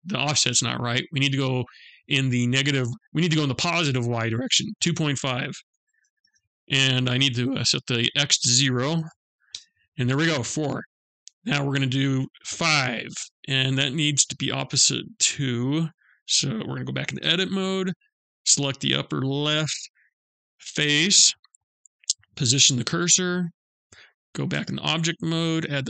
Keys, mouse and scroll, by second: 4.0 click, 7.0 click, 10.2 middle click, 15.5 click, 16.6 Tab, 17.8 click, 21.9 shift+s, 24.0 Tab, 24.8 shift+a.